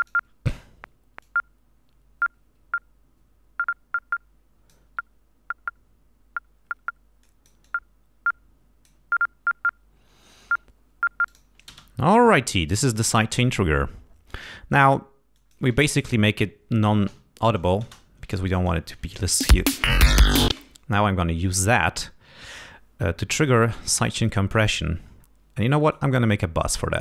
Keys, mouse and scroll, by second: 0.0 click, 1.2-4.9 drag, 7.2-9.0 drag, 11.2 click, 12.0 space, 15.3 click, 17.0 l, 17.8 space, 18.5 click, 19.4 space, 20.0 ctrl+scroll down 2, 20.5 ctrl+space, 20.9-22.0 ctrl+scroll down 5, 22.2-22.5 scroll up 2, 23.4 click, 25.0-25.4 scroll down 1, 25.8 right click.